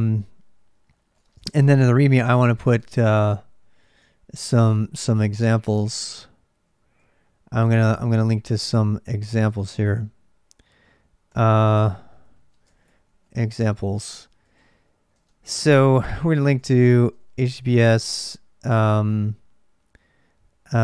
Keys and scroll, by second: 0.6-17.3 typing, 1.9 ctrl+[, 11.4 Return.